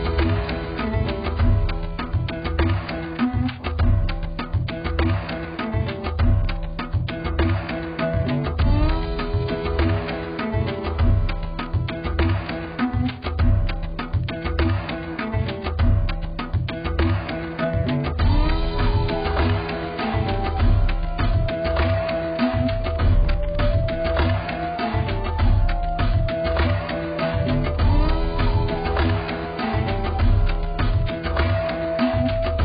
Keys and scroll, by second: 24.3 ctrl+t.